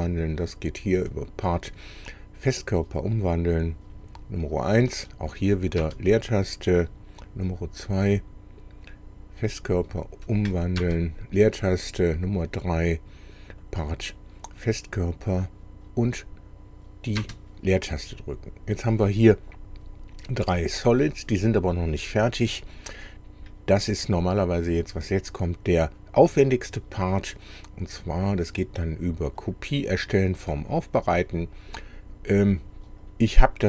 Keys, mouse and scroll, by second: 1.1 click, 3.3 click, 5.8 space, 6.5 click, 7.5 click, 9.5 click, 10.8 space, 12.1 click, 13.5 click, 15.3 click, 17.2 space, 22.7 click, 27.4 click, 29.4 click, 33.1 click.